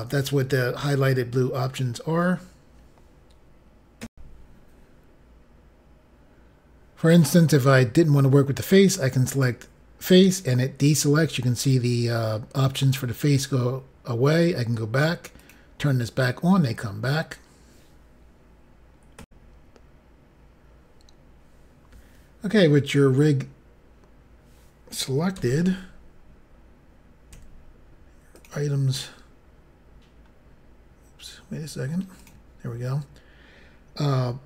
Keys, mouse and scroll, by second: 4.0 Pause, 4.1 Insert, 9.3 click, 15.4 click, 19.2 Insert, 19.2 click, 25.3 n, 27.3 n, 28.3 click, 30.1-30.8 scroll up 5, 32.2 click.